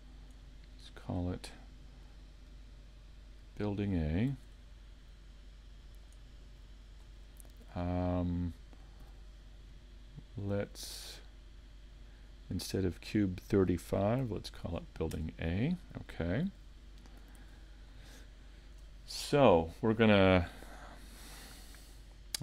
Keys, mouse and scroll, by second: 1.1 click, 6.3 click, 9.0 n, 10.5 click, 16.5 n, 18.4 shift+middle click.